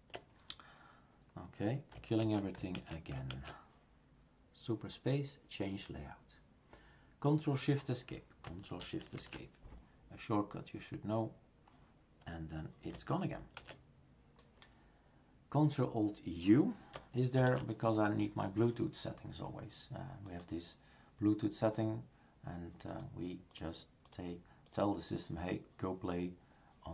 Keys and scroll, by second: 2.2 shift+super+q, 3.3 shift+super+q, 9.2 ctrl+shift+Escape, 13.6 shift+super+q, 17.4 ctrl+alt+u.